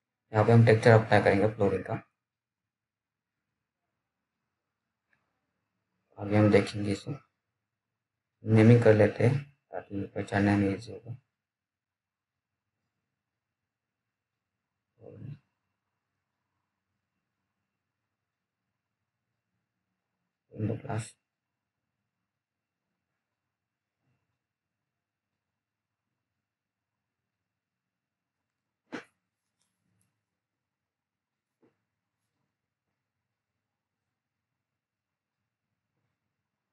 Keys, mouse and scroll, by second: 3.2-3.9 typing, 5.8 click, 8.0-11.1 typing, 12.5 click, 14.3-16.6 typing, 17.7 click, 21.4-23.9 typing, 25.8 click, 30.6 click, 32.8-33.5 scroll down 1, 33.7 alt+middle click, 34.6-35.0 scroll up 1, 35.0 scroll down 1, 35.4 alt+middle click, 36.2 alt+click.